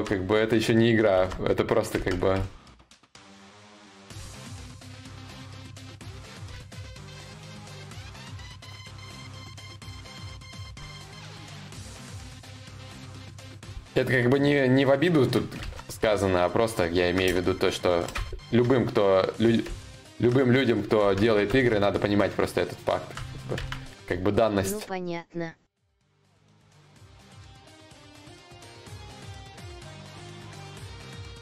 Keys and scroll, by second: 0.7 ctrl+z, 0.7 y.